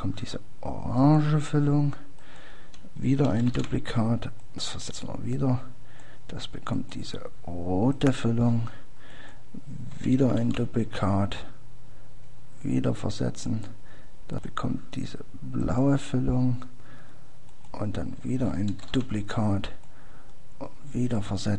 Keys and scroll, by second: 4.7 ctrl+d, 11.1 ctrl+d, 17.5 ctrl+d.